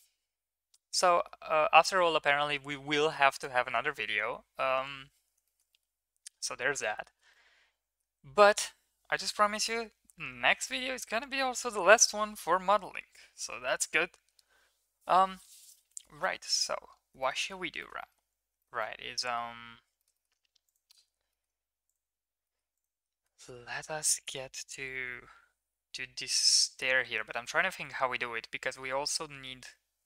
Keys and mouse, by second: 1.0 middle drag, 5.4 shift+middle click, 5.7 middle drag, 7.0 shift+middle click, 7.3-8.0 middle drag, 17.2 shift+middle click, 17.4 middle click, 17.7 shift+middle click, 18.0 middle click, 18.5 shift+middle click, 18.8-19.4 middle drag, 19.9 shift+middle click, 20.2 middle click, 21.3 middle click, 22.4 middle click, 23.3 shift+a.